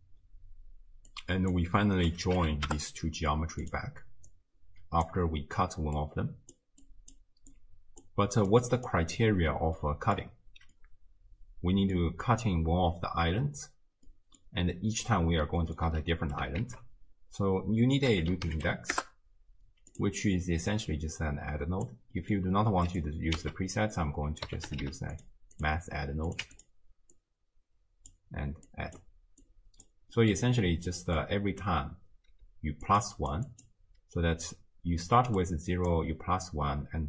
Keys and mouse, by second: 1.2-3.7 drag, 4.3-5.1 drag, 6.0-6.6 drag, 6.8-8.1 drag, 8.6 click, 9.8-10.3 middle drag, 10.8-12.1 middle drag, 12.3 middle click, 14.1 middle click, 15.5-15.8 middle drag, 16.6 ctrl+a, 20.7 drag, 21.5 click, 22.2 click, 22.2 right click, 22.9 click, 23.4 x, 24.1-25.7 drag, 24.8 d, 26.3 click, 27.2-28.1 drag, 28.7 drag, 29.5-29.9 drag, 30.2 click, 30.9 click, 31.2 click, 32.5-37.0 typing, 32.9 click, 33.2 click, 33.5 click, 35.4 click.